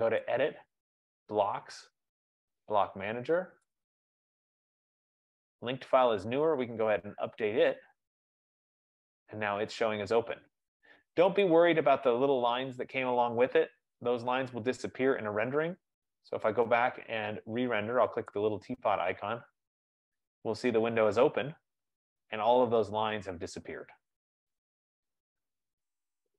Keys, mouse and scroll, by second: 0.5 click, 4.2 click, 7.1 click, 9.6 click, 11.8 click, 13.9 F15, 17.7 F15, 18.5 click.